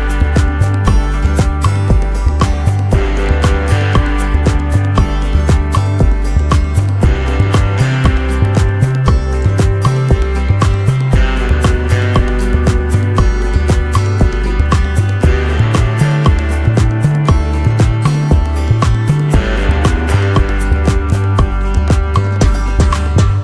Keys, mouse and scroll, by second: 4.5 alt+scroll down 1, 4.8 space, 5.9 space, 15.0 t, 16.4-19.5 typing, 20.6 BackSpace, 20.8 r.